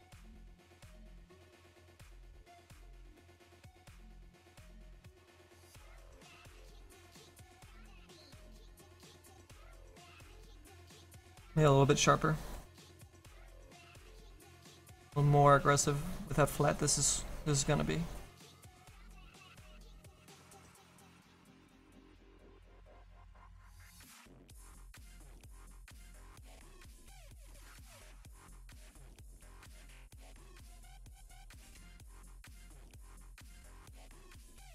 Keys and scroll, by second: 0.2 s, 12.4 s, 19.8 s.